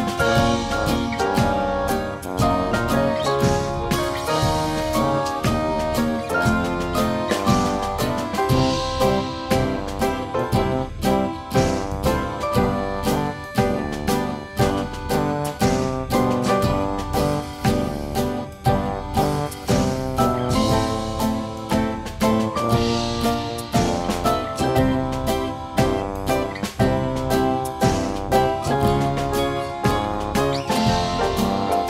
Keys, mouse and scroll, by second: 0.0-1.2 drag, 1.5 click, 3.5 click, 4.0 click, 5.6 click, 6.6 click, 7.6 click, 8.8 click, 11.9 click, 13.6 click, 14.6-15.6 drag, 16.2 click, 18.9 right click, 20.3 click, 22.0 click, 24.3 F3, 25.0 click, 25.7 Delete, 26.4 click, 26.7 Delete, 27.5 F2, 28.9 click, 31.4 click.